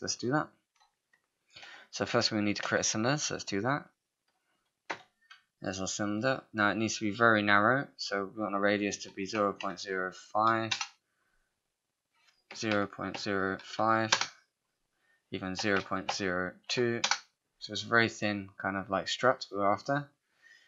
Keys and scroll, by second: 1.8 space, 10.7 Return, 12.3-13.2 typing, 14.1 Return, 17.0 Return.